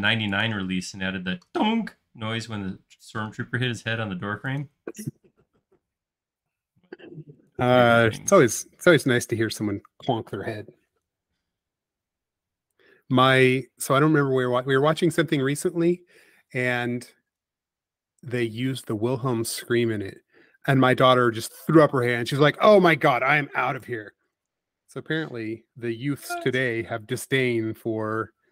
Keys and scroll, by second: 8.1 space, 9.2 m, 11.4 Up, 15.2 space.